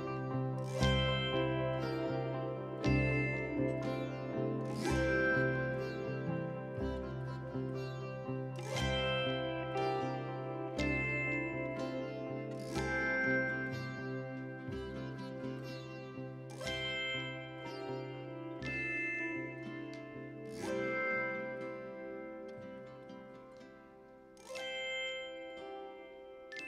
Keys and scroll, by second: 1.3 4, 6.2 3, 6.9 [, 7.6 ], 14.3 4, 17.2 2, 18.0 ,, 20.4 ctrl+z, 20.8 4, 22.8 3.